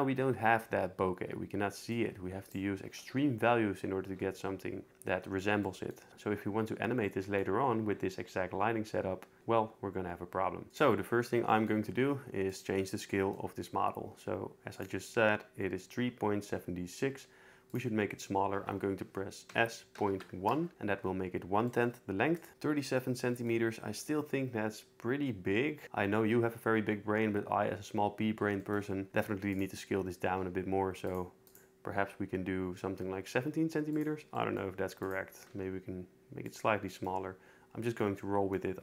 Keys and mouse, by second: 2.0 shift+click, 10.7 ctrl+z, 10.7 click, 11.5 middle click, 17.7-19.0 drag, 19.5 s, 20.0 ., 20.1 1, 20.4 Return, 22.4 click, 29.5 click, 30.4 s, 33.9 click, 35.0 click, 35.5 s.